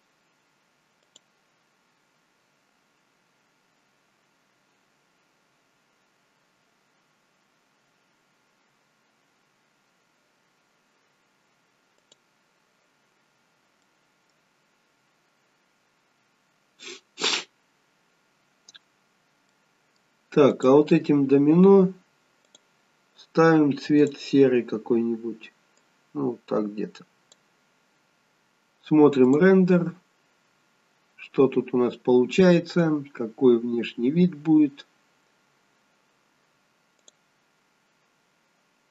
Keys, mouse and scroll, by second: 18.1 middle click, 18.1-19.0 scroll down 2, 19.0-19.5 scroll up 1, 19.5 middle click, 20.5 click, 22.4 click, 24.5 click, 29.7 click, 30.6-32.1 scroll up 2, 34.9-35.4 scroll down 1, 35.4-35.8 scroll up 3.